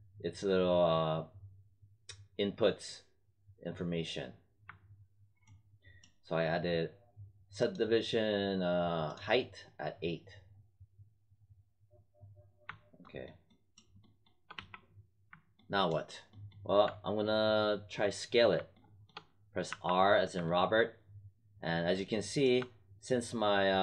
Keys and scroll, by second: 14.4 w, 19.6 r.